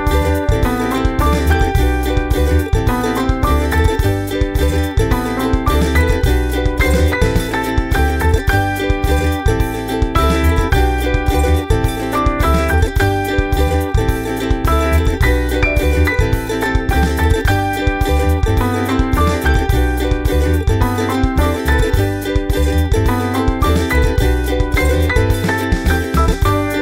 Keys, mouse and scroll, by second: 1.9 click, 2.7 click, 3.1 ctrl+scroll down 2, 3.4 ctrl+middle click, 3.8 ctrl+scroll up 4, 5.7 click, 6.5 click, 6.9 click, 7.2 click, 8.2 ctrl+c, 8.5 click, 8.9 click, 9.5 click, 9.8 click, 10.3 click, 10.7 click, 11.0 ctrl+v, 12.0 click, 13.8 click, 15.1 click, 16.3 ctrl+c, 16.9 click, 17.3 ctrl+v, 18.3 click, 18.7 click, 19.7 click, 21.0 click, 21.9-22.9 drag, 23.6 click, 24.5 click, 25.3 ctrl+scroll down 2.